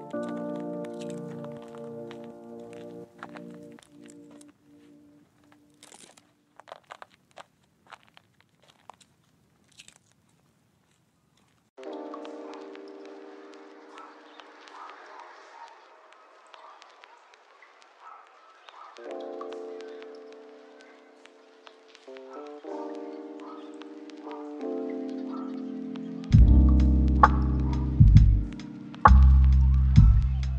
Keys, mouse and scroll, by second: 0.4 ctrl+middle click, 1.0 shift+middle click, 2.2 double click, 12.6 middle click, 13.1 shift+middle click, 13.5 ctrl+middle click, 14.7 shift+middle click, 15.1 right click, 18.2 typing, 18.3 Return, 19.0 double click, 19.5 right click, 20.3 typing, 20.3 Return.